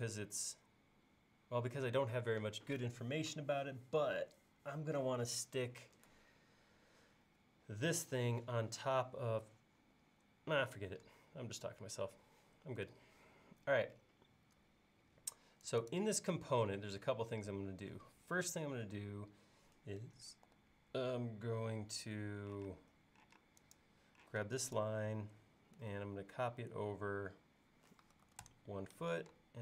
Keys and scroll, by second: 20.5 f, 22.7 space, 23.4 space, 28.0-28.8 typing.